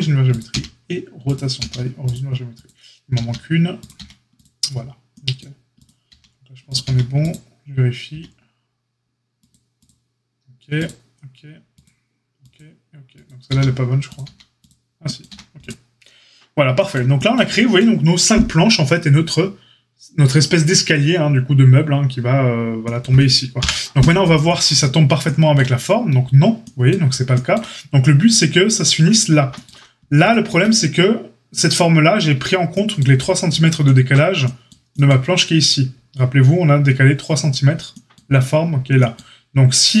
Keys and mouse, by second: 0.2 click, 0.4 q, 1.5 q, 2.6 click, 3.1-5.7 middle drag, 3.1 q, 3.9 q, 5.7 click, 5.8-9.7 middle drag, 6.0 q, 6.8 q, 8.1 q, 9.7 click, 9.8-10.7 middle drag, 10.7 click, 10.8-11.8 middle drag, 11.8 click, 12.5-13.2 middle drag, 13.2 click, 13.4-40.0 middle drag, 13.4 q, 14.2 q, 15.2 a, 23.6 KP_Divide, 30.4 Tab.